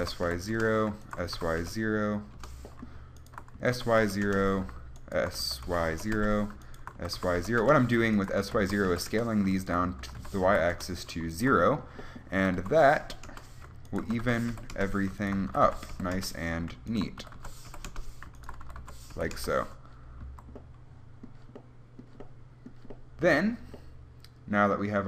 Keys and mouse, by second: 0.2 s, 1.5 s, 3.8 s, 4.5 click, 5.4-7.2 drag, 5.6 s, 7.2 s, 8.7 s, 10.2 s, 12.6 s, 14.3 s, 15.7 s, 17.4 s, 18.9 s, 20.4 a.